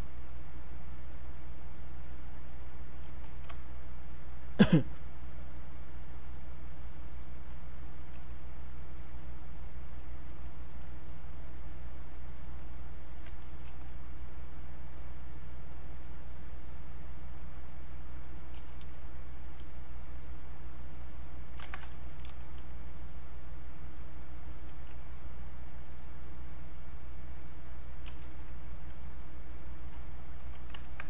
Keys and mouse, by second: 5.5-9.0 drag, 9.0-12.5 drag, 12.5 alt+click, 15.3-18.6 drag, 18.6 q, 20.2-21.6 drag, 21.6 ctrl+z, 22.5-25.9 drag, 25.9-28.1 drag, 28.1 q, 28.4-30.9 drag.